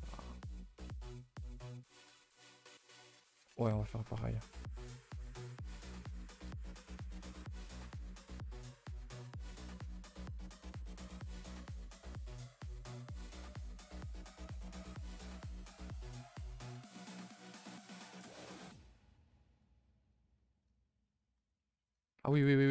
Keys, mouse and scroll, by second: 1.0 click, 1.5 click, 12.1-12.4 scroll up 5, 12.4-15.5 typing, 13.7 click, 17.2 r, 18.1 g, 19.1 click, 19.4 e, 21.3 r, 22.3 r.